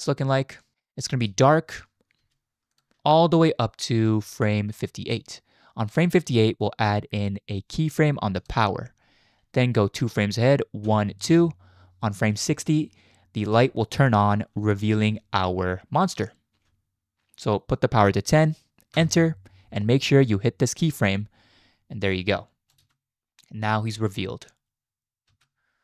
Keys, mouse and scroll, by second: 0.7-1.0 drag, 1.2 space, 2.2 space, 2.7 click, 3.0 space, 4.0 space, 4.4-5.2 drag, 8.4 click, 10.9 Right, 11.3 Right, 13.5-19.0 drag, 21.0 click, 22.1-22.8 drag, 22.8 space, 25.3 space.